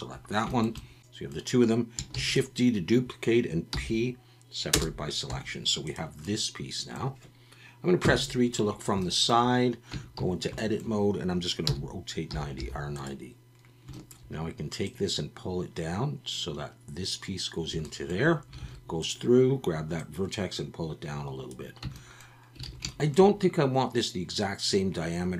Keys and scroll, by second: 2.1 shift+d, 3.7 p, 5.3 Tab, 8.0 KP_3, 9.9 Tab, 10.2 a, 11.6 r, 12.3 9, 12.6 0, 18.6 alt+a, 21.8 Tab, 22.6 alt+a.